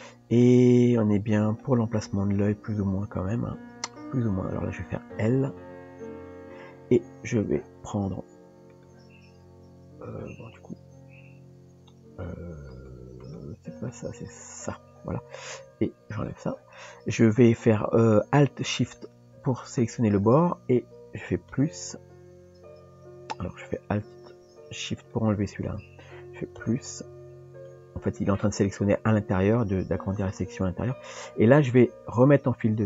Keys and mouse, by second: 0.4 shift+middle click, 12.7 click, 13.8 click, 14.7 click, 16.3 click, 19.0 alt+shift+click, 21.5 ctrl+KP_Add, 25.0 alt+shift+click, 26.6 ctrl+KP_Add.